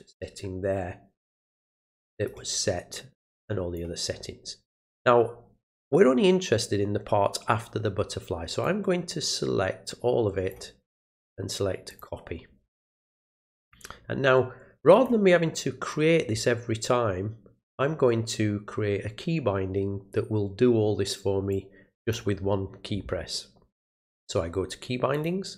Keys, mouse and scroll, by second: 0.2-2.3 drag, 3.4 click, 8.6-10.5 drag, 11.0 right click, 11.9 click, 13.6 click, 14.9 click, 21.5 click, 23.9 click, 25.1 click.